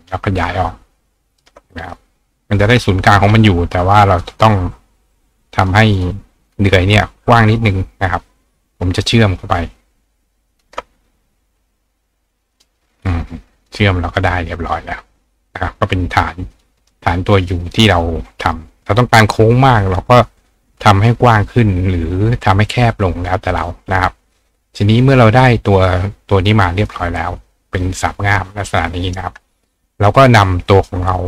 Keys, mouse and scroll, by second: 0.1-1.4 shift+drag, 1.9 ctrl+click, 2.9 click, 4.1 click, 5.1 click, 6.0 click, 6.5 click, 9.0 shift+click, 10.5 shift+click, 12.5 click, 13.6 click, 14.6 click, 16.5 click, 16.8 right click, 18.0 click, 19.2 right click, 24.5 click, 25.4 click, 26.0 click, 26.9 click, 30.8 click.